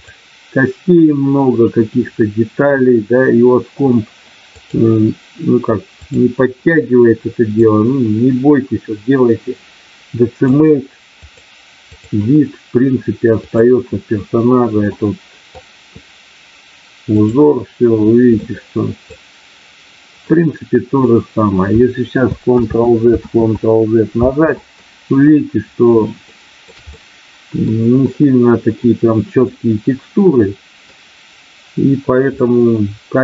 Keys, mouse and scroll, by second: 0.0-4.1 drag, 4.6-6.1 drag, 7.5-10.5 drag, 11.1 click, 13.4 click, 14.9 middle click, 18.2 middle click, 20.2 middle click, 22.6 ctrl+z, 23.2 ctrl+z, 26.2 shift+middle click, 26.9 middle click, 29.5-30.9 middle drag, 32.4-33.2 middle drag.